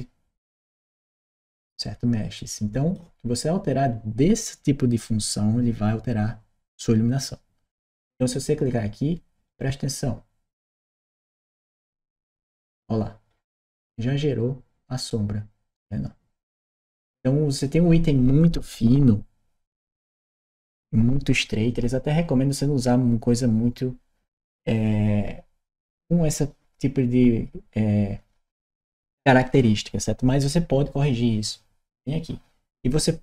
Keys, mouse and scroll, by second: 10.5 click, 11.5 click.